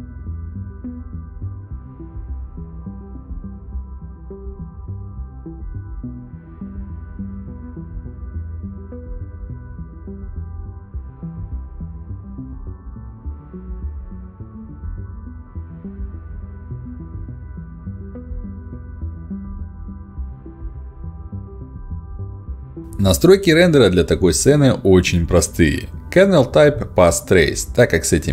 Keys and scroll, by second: 5.9 s, 11.2 s, 14.3 s.